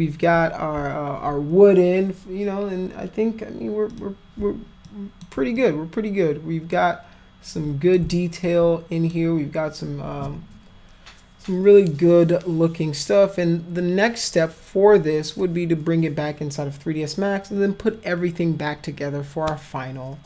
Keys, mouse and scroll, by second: 3.9 click, 4.9 alt+click, 5.6-8.0 drag, 8.4 alt+click.